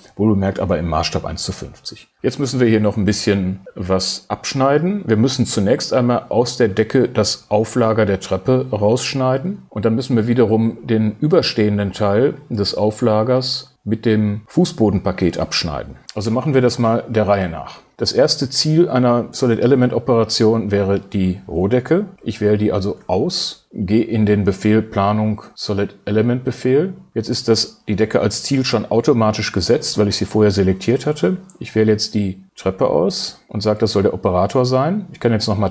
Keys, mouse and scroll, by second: 22.0 shift+space, 33.1 shift+space.